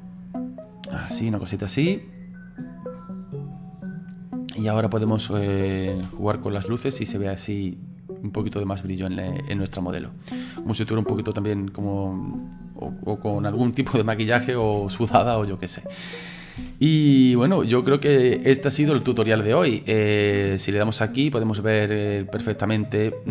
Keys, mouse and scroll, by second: 2.9 middle click, 3.7-5.0 scroll down 2, 5.0 right click, 5.9 g, 9.6-15.1 middle drag, 15.1 d, 15.3 d, 16.6 g, 18.2-19.8 middle drag, 19.8-23.3 drag.